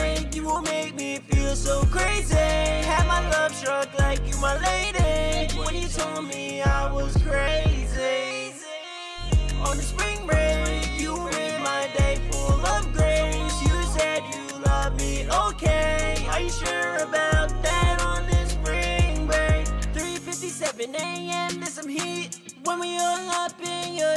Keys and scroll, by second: 1.7-2.9 typing, 6.2 ctrl+super+w, 12.0-12.7 typing, 14.0 ctrl+super+w, 15.5 shift+=, 15.6 shift+=, 15.8 shift+=, 21.0 super+s.